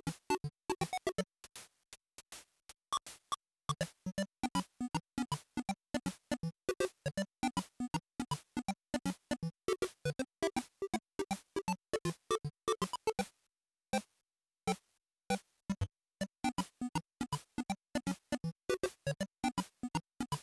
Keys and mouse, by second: 1.7-15.6 drag, 18.9-20.2 drag.